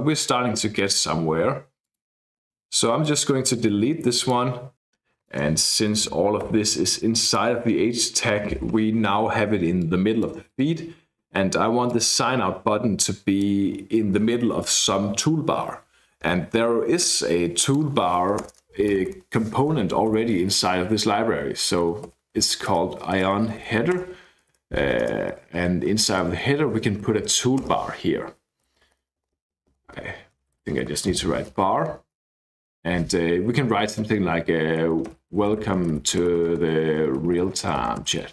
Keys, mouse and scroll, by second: 1.8 click, 3.0-4.4 drag, 4.7 click, 6.5 BackSpace, 7.2 click, 9.8 click, 10.5 click, 11.9-13.7 drag, 16.3-17.6 scroll up 2, 17.6 click, 18.4 Return, 18.5 Return, 18.9 Up, 19.1 Up, 20.1 <, 21.3-27.7 typing, 25.0 Return, 28.7 Left, 29.2 Left, 29.3 Left, 29.7 Left, 30.0 Right, 30.5 a, 30.9 r, 31.1 Escape, 32.2 Down, 34.6-38.3 typing.